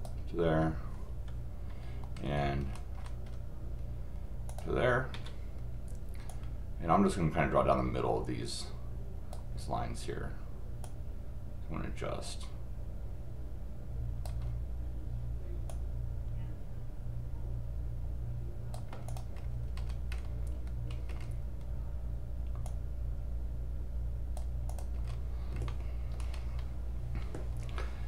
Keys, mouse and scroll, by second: 2.2-2.6 scroll up 1, 2.6-3.0 scroll down 2, 4.5 click, 6.3-9.3 drag, 10.8-14.2 drag, 15.7-18.7 drag, 19.0 click, 19.8-20.3 scroll up 4, 20.7-21.2 scroll down 4, 22.6 click, 24.7 click, 24.9 scroll up 4, 25.7 middle click, 26.3 scroll up 2.